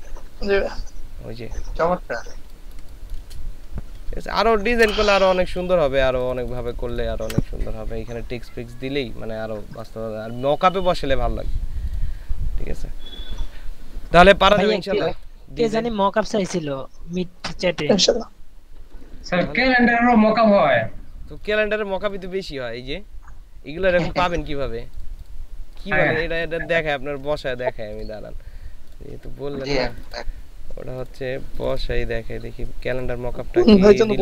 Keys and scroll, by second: 2.5 ctrl+space, 4.6 ctrl+alt+shift+s.